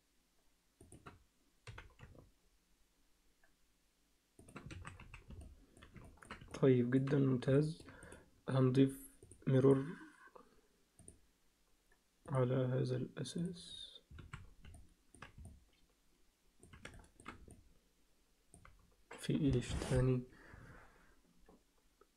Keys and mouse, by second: 1.7 g, 4.7 alt+a, 5.0 z, 5.4 alt+middle click, 6.1 ctrl+alt+middle click, 6.5 alt+middle click, 7.5 alt+shift+middle click, 8.1 click, 9.6-11.1 drag, 12.3 click, 14.3 alt+a, 14.7 alt+middle click, 15.4-16.6 alt+middle drag, 16.9 alt+shift+middle click, 17.5-18.6 alt+middle drag.